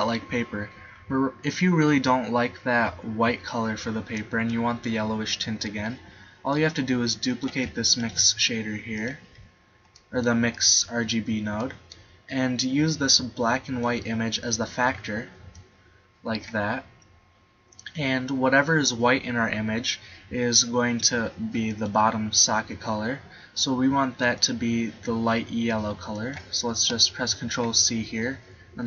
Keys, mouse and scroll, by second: 8.1 shift+d, 21.7-23.6 middle drag, 27.9 ctrl+c.